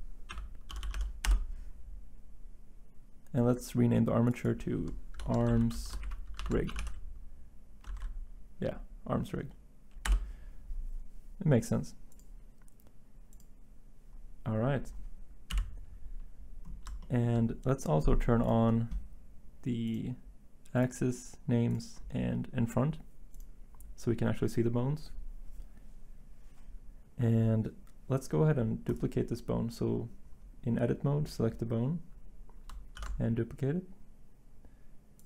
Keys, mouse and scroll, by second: 2.3-3.1 typing, 10.7 ctrl+a, 10.7 Return, 10.7 typing, 15.5 1, 32.9 d.